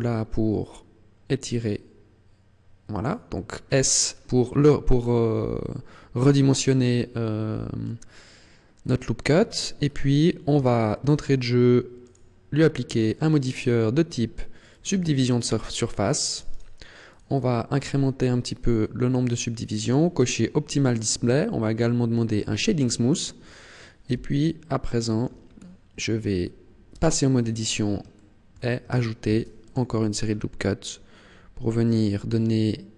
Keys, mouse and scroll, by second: 3.0 click, 3.8 scroll down 6, 4.4-4.8 scroll up 5, 4.9-5.6 scroll down 2, 6.2 scroll up 2, 6.9 scroll up 1, 9.2 Tab, 9.7-10.7 scroll down 2, 10.7 shift+middle click, 11.9 click, 12.9 click, 16.2 click, 16.4 click, 17.1 click, 17.3 click, 19.7 click, 22.3 click, 24.0 t, 24.7 shift+middle click, 25.3 scroll up 2, 25.9 scroll down 1, 26.9 Tab, 28.1 shift+middle click, 29.2 ctrl+r.